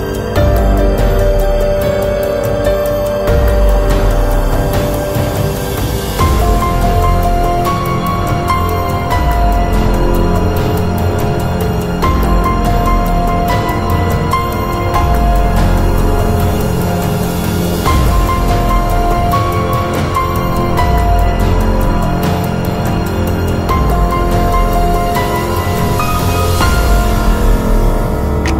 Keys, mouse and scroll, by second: 1.1-2.8 drag, 2.8 KP_7, 4.1 click, 5.0 shift+a, 8.4 shift+a, 10.7 shift+a, 12.9-14.4 drag, 19.8 scroll down 1, 20.3-22.2 middle drag, 22.8 right click, 23.6 Delete, 24.3 Delete, 25.2 right click, 25.6 Delete, 26.4 right click, 26.9 Delete.